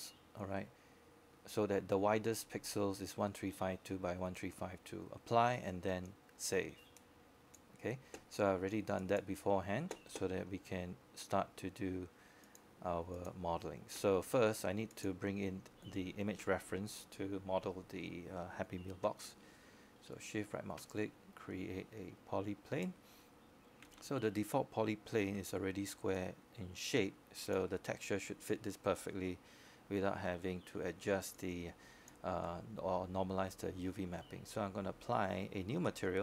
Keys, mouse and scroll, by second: 24.9 e, 31.4 middle click, 35.7 right click.